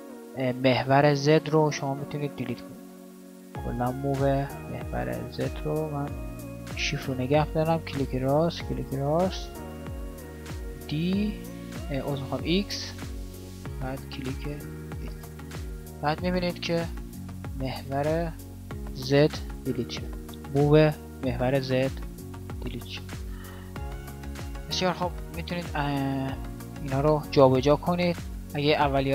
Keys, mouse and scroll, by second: 10.1 x, 23.1 ctrl+z, 23.5 ctrl+z, 23.7 ctrl+z, 25.0 a.